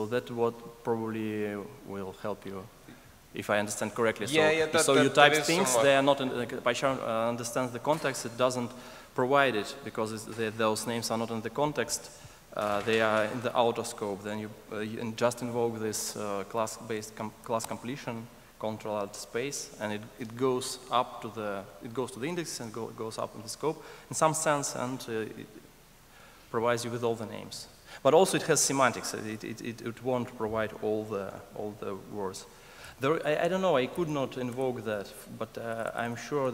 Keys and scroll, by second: 18.0 ctrl+alt+space, 32.8 Escape.